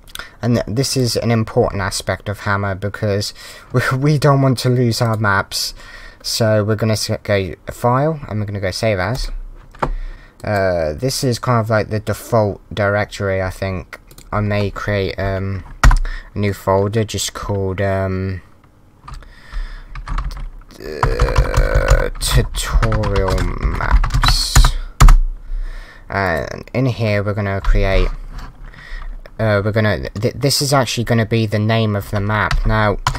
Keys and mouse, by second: 0.9 click, 5.0 click, 10.1 click, 10.4 click, 14.1 click, 15.8 BackSpace, 26.2 click, 32.5 m, 33.0 BackSpace.